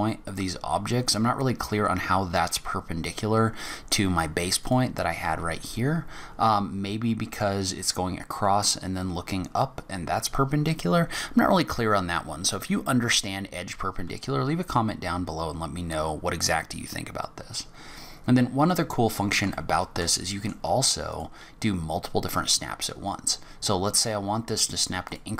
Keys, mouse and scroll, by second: 14.3 scroll down 2, 14.8-17.3 scroll up 1, 17.4-17.8 scroll down 3, 18.7 scroll down 2, 19.0-19.5 scroll up 4, 19.6 shift+middle click, 20.2 middle click, 21.1 click.